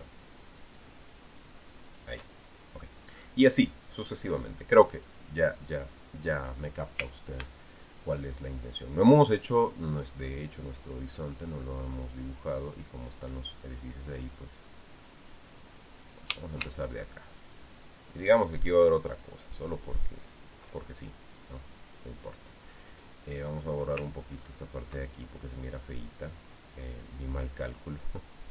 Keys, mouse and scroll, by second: 2.7 ctrl+shift+click, 16.9 shift+click, 19.8 ctrl+shift+click, 21.0 ctrl+shift+click, 24.1 click, 25.1-26.2 ctrl+scroll up 2, 26.6-28.5 drag.